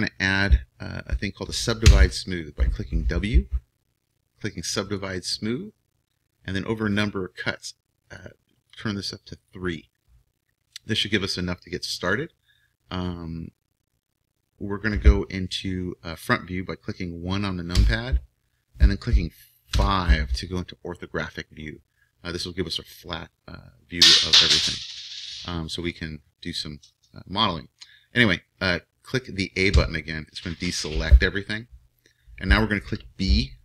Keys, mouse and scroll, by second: 1.8 w, 8.1-17.8 drag, 17.8 KP_1, 19.7 KP_5, 29.8 a.